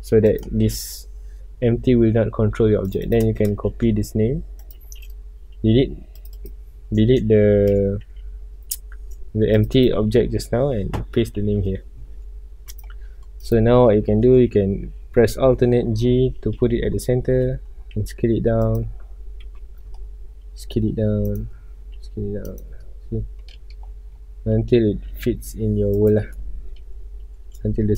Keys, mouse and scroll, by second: 0.2 click, 2.8 click, 3.0-4.7 drag, 5.5 x, 6.1 click, 6.4 click, 7.3 Escape, 8.2 ctrl+z, 9.5 click, 9.8-11.6 drag, 11.6 KP_Enter, 12.7 click, 13.4 click, 15.4 alt+g, 16.4 KP_Decimal, 17.0 scroll up 1, 17.4-17.9 middle drag, 17.9 s, 18.7 click, 19.6 KP_Decimal, 20.0 scroll up 1, 20.4 s, 21.4 click, 21.6 scroll up 1, 22.0 s, 22.6 click, 22.8 scroll up 1, 23.5 middle click, 24.1 scroll down 1, 24.5-25.0 middle drag, 25.0 s, 26.0 click, 26.3-27.2 middle drag, 27.2 s.